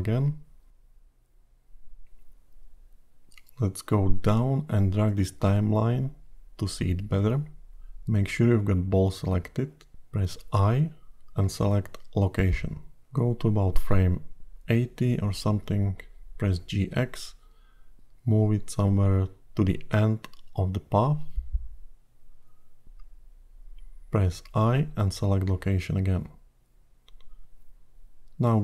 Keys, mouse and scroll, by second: 0.2 g, 6.9 click, 9.2 i, 14.0 click, 15.9 g, 26.0 i.